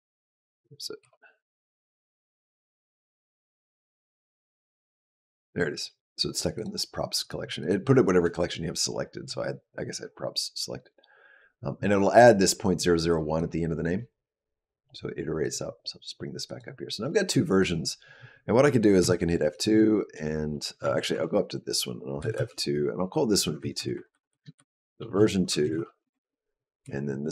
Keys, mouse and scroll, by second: 0.8 KP_Decimal, 2.8-3.9 scroll down 4, 4.5 click, 4.9-6.3 scroll down 2, 6.5 click, 7.0 click, 7.4 click, 13.2 click, 16.4 click, 17.4 click, 18.8 F2, 20.9 Up, 22.0 F2, 23.2 Left, 23.6 Left, 23.9 Left, 26.7 Up, 27.1 2.